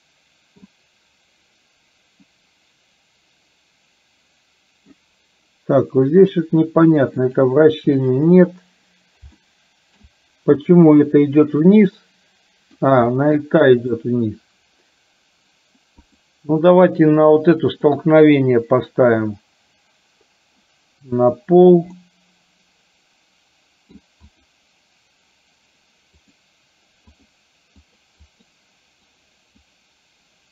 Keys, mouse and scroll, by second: 2.3-5.2 drag, 7.3-8.4 drag, 9.4 shift+middle click, 12.0 middle click, 13.2 middle click, 16.1 click, 17.7 click, 22.0-24.1 middle drag, 24.4 click, 26.2 click, 27.2 click, 28.0 click, 29.3 click.